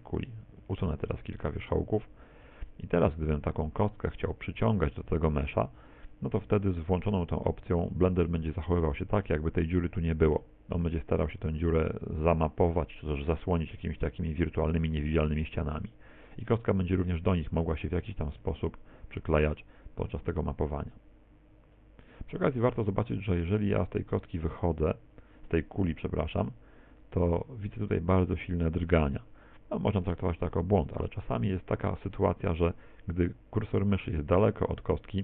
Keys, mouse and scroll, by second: 0.6 x, 2.4 middle click, 3.5 Tab, 4.1 right click, 8.4 middle click, 15.5 middle click, 18.0 g, 30.8 middle click, 31.8 middle click.